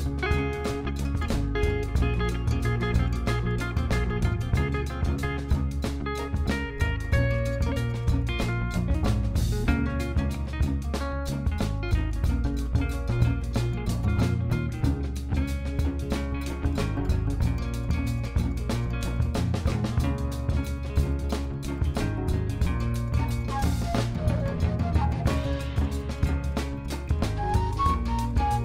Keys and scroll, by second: 2.2 s, 2.8 x, 3.1 g, 3.2 x, 7.1 Escape, 8.4 g, 8.6 shift+z, 13.0 r, 15.4 s, 18.3 alt+a.